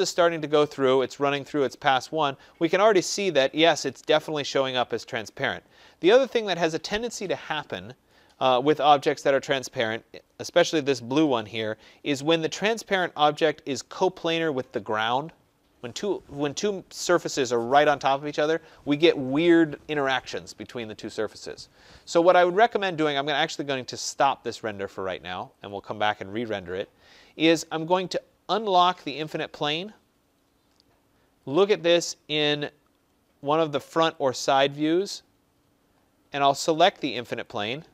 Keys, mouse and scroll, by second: 24.7 click, 25.7 click, 29.6 click, 31.5 click, 31.8 click, 34.0 click, 34.2 click, 35.9 middle click, 36.0 middle click, 37.4 click.